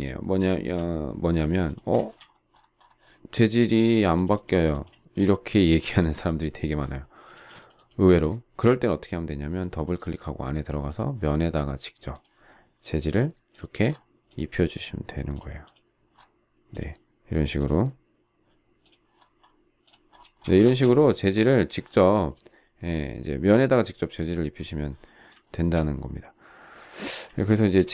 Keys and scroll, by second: 7.3 space, 20.6 space.